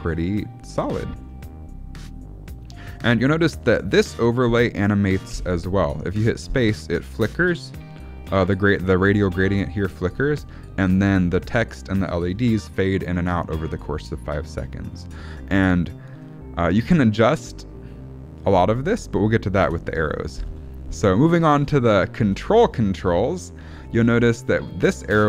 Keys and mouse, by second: 1.3-2.5 shift+middle drag, 5.2 space, 16.2-16.7 shift+middle drag, 19.6 space, 20.3 shift+Left, 21.4 alt+a, 21.7-22.2 shift+middle drag, 24.7 click.